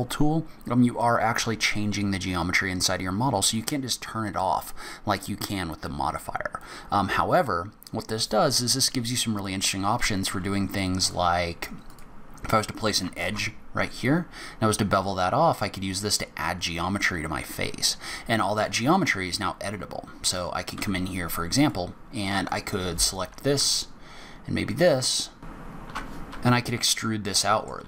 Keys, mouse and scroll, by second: 9.6 click, 10.5 ctrl+r, 13.4 ctrl+b, 21.0 3, 21.8 click, 22.7 alt+click, 24.9 alt+shift+click, 25.7 e, 26.6 scroll up 2, 27.0 scroll down 1, 27.4 middle click.